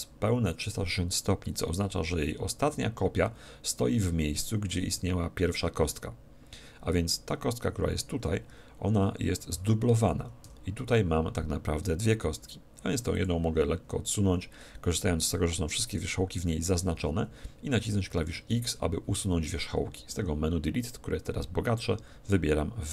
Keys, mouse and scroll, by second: 10.4 g, 13.2-15.1 drag, 16.5 z, 18.1 x.